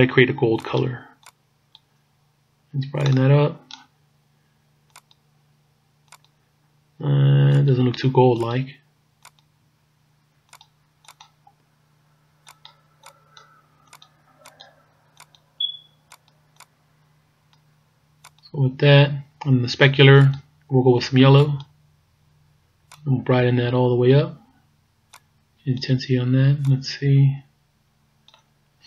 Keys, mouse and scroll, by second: 7.6 click, 20.2 click, 23.0 click, 25.2 click, 26.8 click.